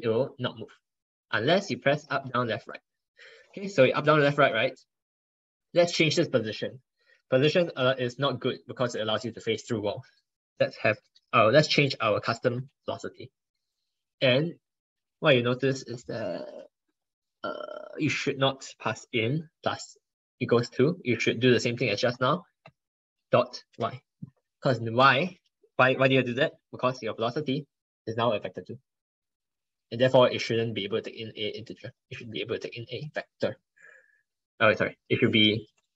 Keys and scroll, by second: 5.1 ctrl+Left, 5.2 ctrl+Left, 7.7 ctrl+BackSpace, 8.0 ctrl+BackSpace, 8.3 ctrl+BackSpace.